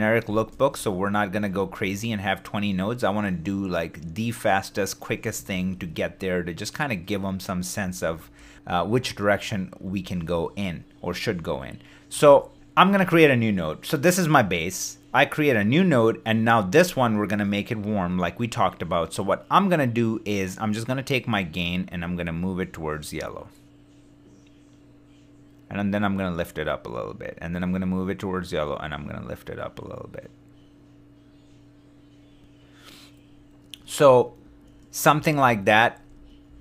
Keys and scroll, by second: 0.8 shift+d, 5.5 shift+d, 12.2 alt+s, 34.1 super+d.